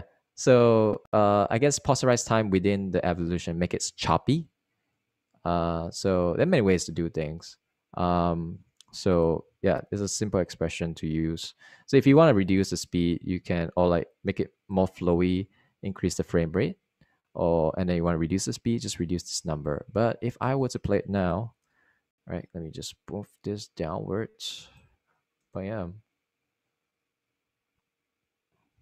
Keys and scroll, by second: 26.5 0.